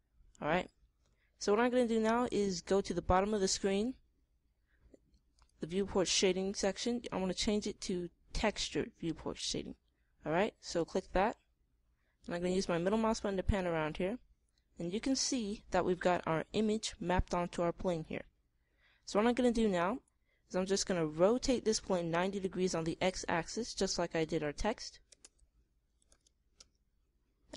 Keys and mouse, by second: 0.0-1.7 drag, 5.8 click, 13.5 middle click, 15.3-18.0 middle drag, 19.1-20.8 middle drag, 25.5 r.